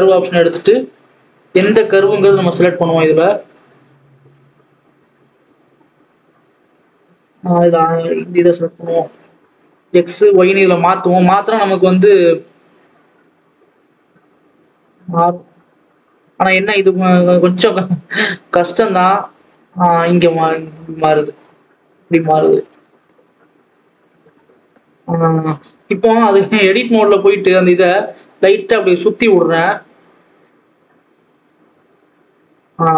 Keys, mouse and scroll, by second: 4.6 click, 9.9-13.3 drag, 13.3-15.8 scroll down 2, 15.8-16.5 scroll down 1, 16.5 click, 18.2 click, 19.2-19.6 scroll up 2, 19.6-20.9 scroll down 1, 20.9 scroll down 1, 20.9-23.1 drag, 24.1 click, 24.5 Tab, 26.3 r, 31.2 Tab, 31.6 alt+a, 32.2 scroll up 1, 32.5 scroll down 2.